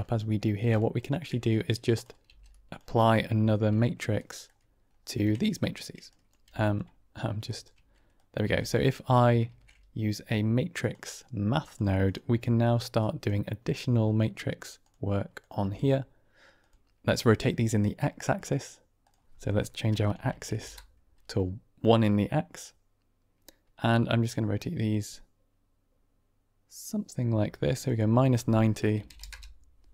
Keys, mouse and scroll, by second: 0.1 middle click, 0.9 ctrl+shift+click, 1.5-2.0 drag, 2.2 g, 3.0 middle click, 3.7-4.3 shift+middle drag, 5.3 ctrl+click, 6.1 click, 6.3 g, 7.4 ctrl+right click, 8.2 click, 8.5 g, 9.4 shift+a, 12.9 click, 14.7 click, 15.5 g, 18.3 click, 19.0-21.1 drag, 20.2 Tab, 24.2-27.7 drag, 27.9-29.7 drag.